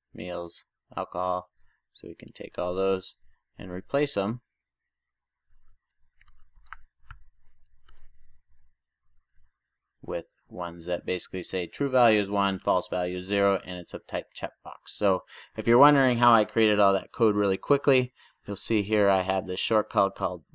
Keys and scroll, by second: 7.2 super+j, 8.0 Return, 9.3 super+s.